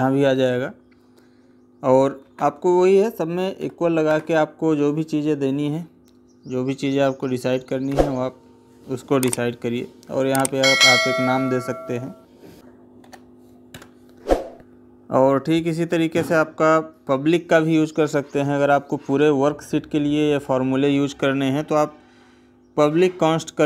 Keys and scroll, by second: 2.0 space, 3.9 space.